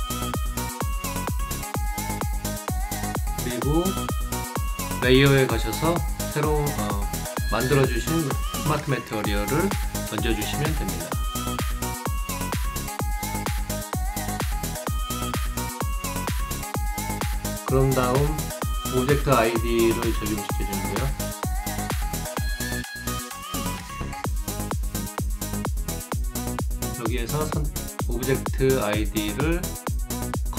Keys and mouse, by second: 0.0 click, 1.2 click, 3.2 click, 6.7 click, 10.6 click, 13.4 click, 19.3 click, 22.0 right click, 25.4 click, 27.4 click.